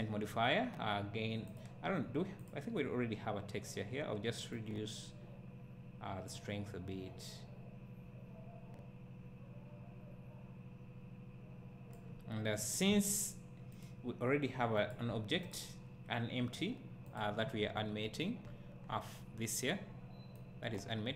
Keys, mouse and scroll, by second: 17.6-18.5 scroll down 2, 18.8 scroll up 1, 20.4-21.1 right drag.